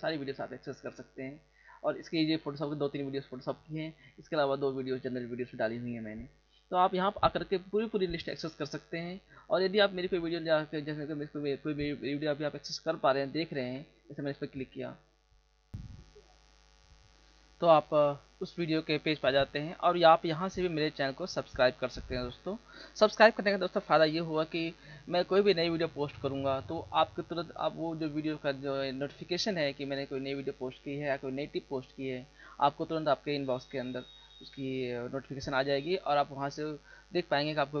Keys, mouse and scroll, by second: 0.0 click, 0.7 click, 1.7-2.1 scroll down 1, 3.3-3.6 scroll down 1, 5.9-7.0 scroll up 4, 10.1-10.9 scroll down 3, 14.2 ctrl+click, 15.2 click.